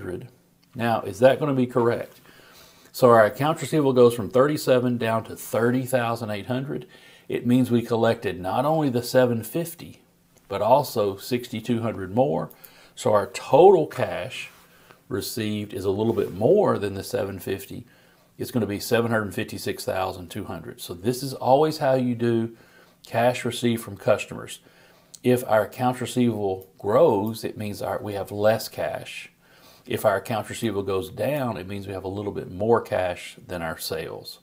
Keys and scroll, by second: 13.8 shift+super+t.